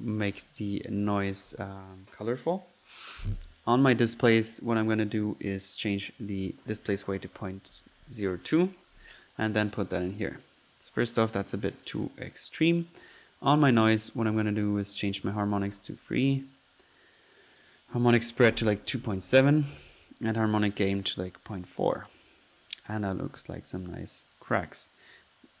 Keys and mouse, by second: 0.8 drag, 2.0 click, 3.1-3.4 drag, 6.5-7.0 drag, 9.6-10.3 drag, 10.8 drag, 11.1 click, 15.0-15.4 drag, 16.0 click, 17.6 click, 17.9 click, 20.3 click, 20.7 click, 22.3 click, 24.4 click.